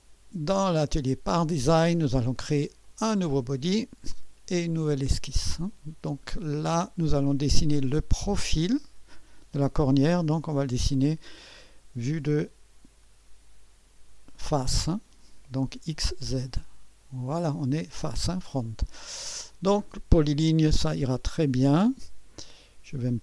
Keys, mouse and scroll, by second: 0.0-1.9 drag, 2.8-3.8 drag, 4.8-5.9 drag, 10.8-14.0 drag, 16.4 click, 20.2 click.